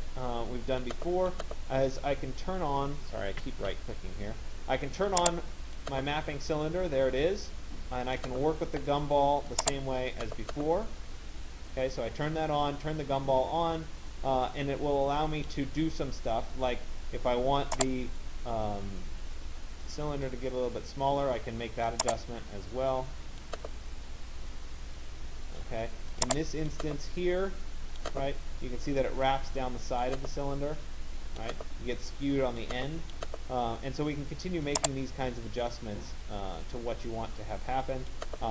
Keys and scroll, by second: 3.0 Escape.